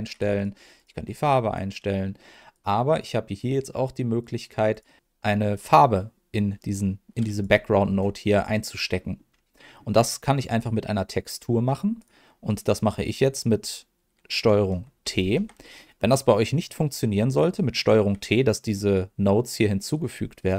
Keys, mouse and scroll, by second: 0.7 click, 2.5 click, 4.7 click, 8.9 middle click, 9.3-9.6 scroll down 1, 9.6 middle click, 10.5 click, 11.0 click, 11.9 click, 12.4 click, 15.0 ctrl+t, 15.6 middle click, 18.9 click.